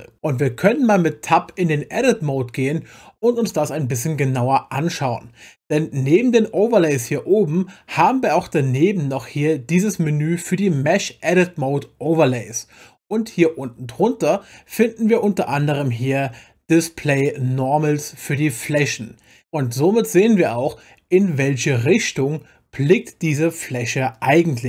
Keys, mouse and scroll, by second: 1.9 Tab.